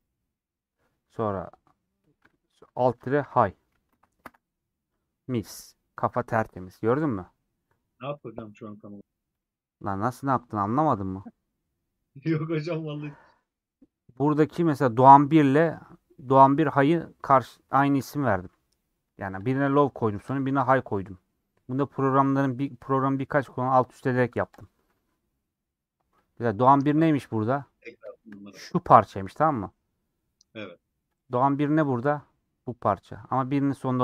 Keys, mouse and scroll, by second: 9.8-14.7 drag, 19.5 click, 24.8 scroll up 1, 26.2 click, 27.1 middle click, 27.8 scroll up 2, 28.0 shift+middle click, 28.4-30.4 scroll up 3, 30.4 click.